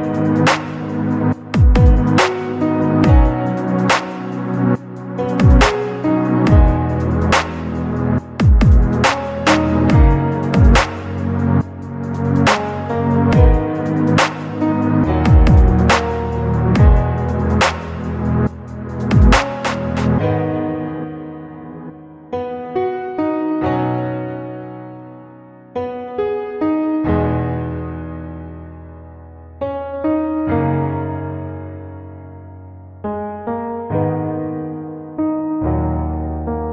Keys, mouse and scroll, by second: 0.0-1.3 middle drag, 1.3-1.9 scroll down 2, 1.9 middle click, 2.8 scroll up 1, 3.2 shift+middle click, 3.8-4.2 scroll up 1, 4.4 click, 5.2 click, 6.1 middle click, 7.4 click, 8.5 alt+s, 10.2 click, 10.8-12.7 drag, 13.2 alt+s, 14.2 click, 14.5 middle click, 15.7 click, 16.3 alt+s, 17.3 click, 17.9-19.1 drag, 19.5 scroll down 1, 19.8 middle click, 21.3 click, 21.9 alt+s, 23.4 click, 24.2-26.0 drag, 26.7-27.1 scroll down 2, 27.1 middle click, 28.6 shift+middle click, 29.1 scroll up 2, 29.8 scroll up 1, 30.1 click, 30.8-32.2 drag, 32.6 middle click, 33.5-33.8 scroll down 1, 34.4 click, 34.8 middle click, 36.0-36.3 scroll up 1, 36.6-36.7 drag.